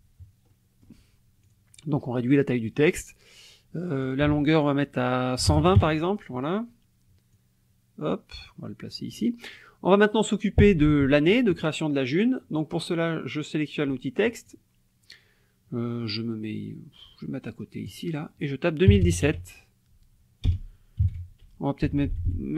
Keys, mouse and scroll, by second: 0.5 click, 1.4 click, 4.0 ctrl+click, 4.3 ctrl+a, 5.4 KP_1, 5.5 KP_0, 5.7 KP_Enter, 7.3-9.3 drag, 14.3 click, 17.8 click, 18.9 KP_2, 19.0 KP_0, 19.2 KP_4, 20.4 BackSpace, 21.0 KP_1, 21.1 KP_7, 21.8 Left.